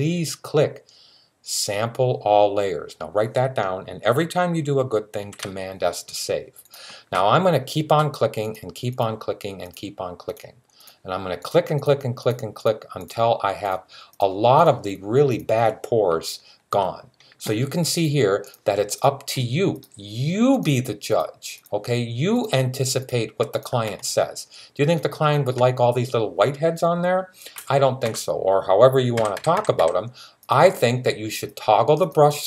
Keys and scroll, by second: 5.0 super+s, 27.4-27.9 typing, 28.9-29.6 typing.